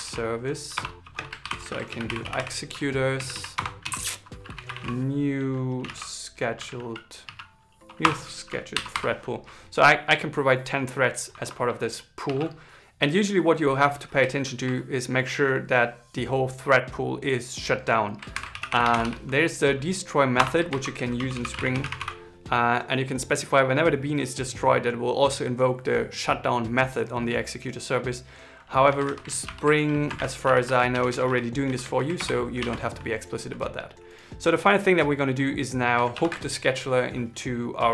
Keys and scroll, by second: 1.1 shift+0, 1.4 shift+e, 18.1 shift+8, 20.4 shift+2, 30.7 shift+Right, 31.8 shift+Right, 32.3 super+s.